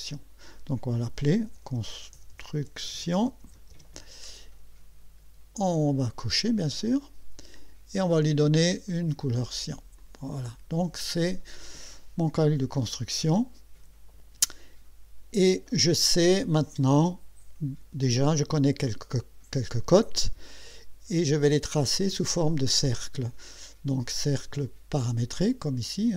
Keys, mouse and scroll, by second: 1.1-4.2 typing, 6.6 click, 7.5 click, 8.9 click, 10.0 click, 24.4 click.